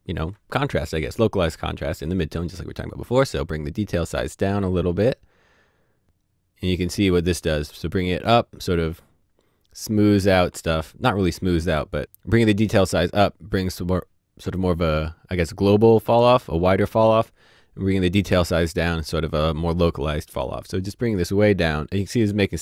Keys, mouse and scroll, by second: 2.9 click.